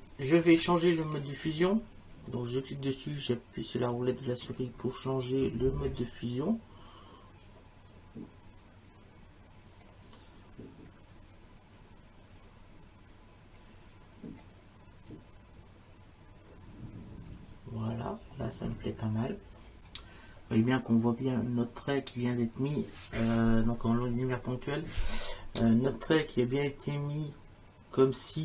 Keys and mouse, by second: 1.1 click, 25.6 space, 25.9 click.